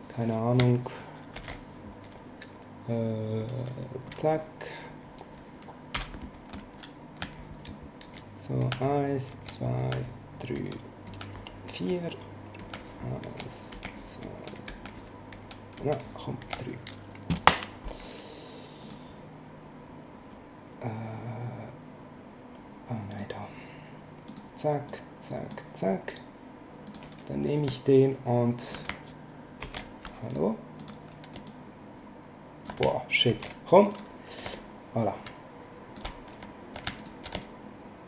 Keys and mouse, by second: 1.3 ctrl+shift+n, 4.1 click, 5.9 b, 7.2 shift+click, 8.6 click, 9.8 click, 11.1 click, 12.6 click, 18.8 click, 23.1 click, 24.3 click, 26.9 click, 29.6 ctrl+z, 30.3 click, 31.4 ctrl+click, 33.3 ctrl+z, 33.9 click, 34.5 ctrl+click, 37.0 shift+click, 37.4 ctrl+click.